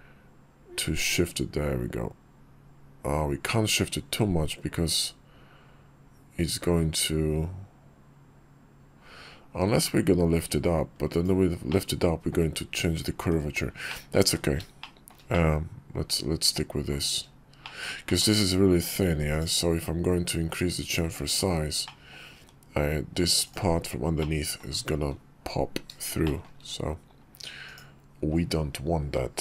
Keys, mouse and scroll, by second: 11.4 click, 12.9 Tab, 13.6 middle click, 14.5 shift+middle click, 15.1-16.6 middle drag, 17.3 shift+middle click, 17.8 middle click, 21.6 middle click, 23.9-24.3 middle drag, 26.0 shift+middle drag.